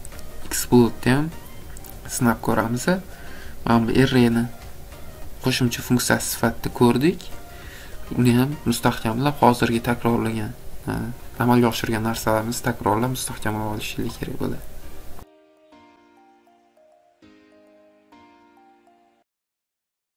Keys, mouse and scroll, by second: 0.5 scroll, 2.9 scroll, 3.7 scroll, 4.7 scroll, 6.7 scroll, 7.8-8.9 scroll.